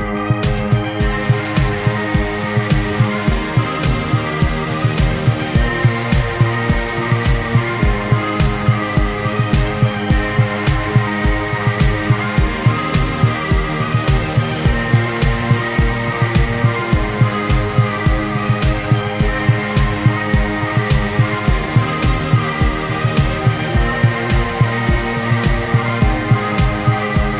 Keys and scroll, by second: 1.6 e, 2.5 space, 5.3 ctrl+z, 9.1 ctrl+z, 10.2 ctrl+z, 10.9 ctrl+z, 14.4 ctrl+z, 16.0 ctrl+z, 19.2 ctrl+z, 19.6 ctrl+z, 20.3 ctrl+z, 20.5 ctrl+z, 21.1 ctrl+z, 22.3 ctrl+z, 26.0 ctrl+z, 27.0 space.